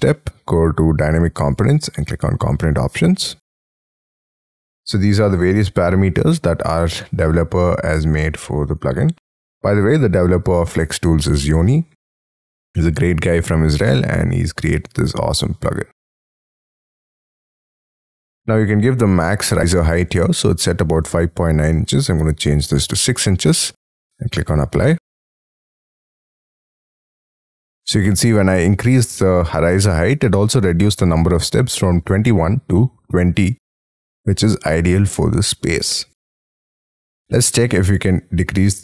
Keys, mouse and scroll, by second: 1.6 double click, 22.1 6, 22.7 shift+', 32.8 middle click, 34.4 scroll down 4, 35.0 middle click.